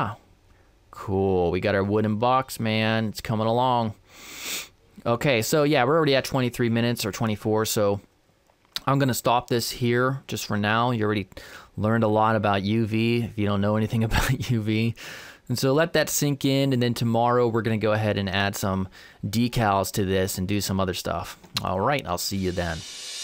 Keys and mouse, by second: 0.4 middle click, 2.3-3.9 middle drag, 3.9-5.3 drag.